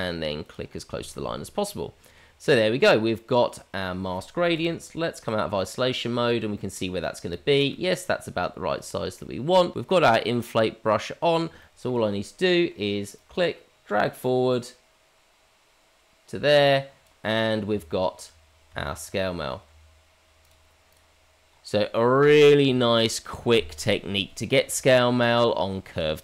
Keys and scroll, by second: 17.7 Tab, 18.7 Tab.